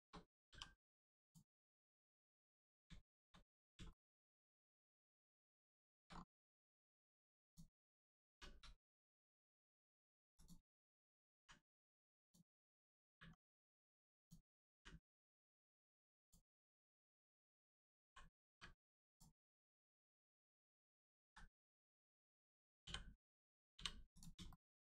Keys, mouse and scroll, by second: 0.5 middle click, 1.2 click, 1.8 middle click, 2.4 click, 2.9 shift+middle click, 5.1 shift+middle click, 6.1-6.5 scroll up 1, 6.7 shift+middle click, 7.4 click, 8.3 u, 9.5 shift+middle click, 10.3 click, 11.3 u, 12.2 click, 13.0 u, 14.1 click, 15.0-15.6 scroll down 1, 16.1 click, 18.0 l, 18.5 u, 19.1 click, 19.9 click, 19.9 u, 21.2 ctrl+z, 21.7 click, 22.8 click, 22.8 l, 24.1 click, 24.5 shift+middle click.